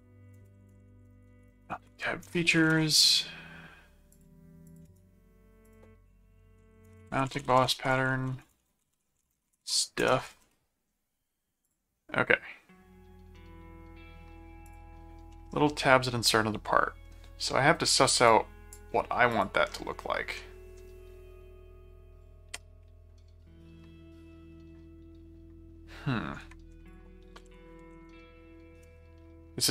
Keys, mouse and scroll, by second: 0.2-3.2 typing, 4.1 shift+click, 4.8 shift+right click, 5.6 click, 6.7-10.7 typing, 11.6 click, 14.6 click, 15.3-17.0 middle drag, 18.3 click, 19.3 click, 19.7-20.8 middle drag, 26.9 click, 27.2-28.6 typing, 28.8 Return.